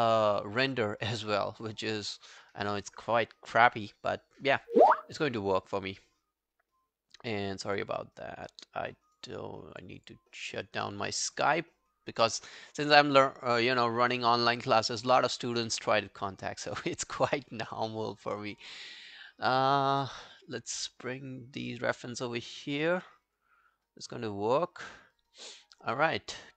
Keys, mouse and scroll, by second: 0.7 double click, 9.1 right click, 10.1 double click, 16.9 double click, 20.1 scroll down 1, 22.4 double click.